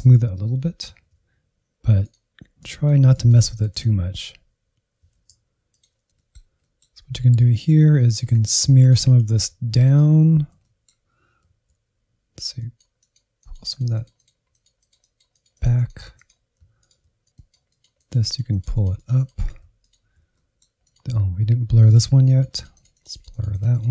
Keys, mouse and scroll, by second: 0.9 shift+f, 1.8-3.2 drag, 3.2 shift+f, 3.7 click, 4.4 middle click, 4.6 scroll down 1, 4.8 middle click, 5.6-6.0 Left, 6.1-7.5 middle drag, 7.5 click, 8.1 alt+z, 8.6 ctrl+click, 8.8 alt+z, 9.0 middle click, 9.6 alt+z, 10.3-14.1 drag, 14.1 f, 14.5 click, 15.6 middle click, 16.5 click, 17.0 middle click, 17.3-19.9 drag, 20.2 middle click, 20.8-23.9 drag.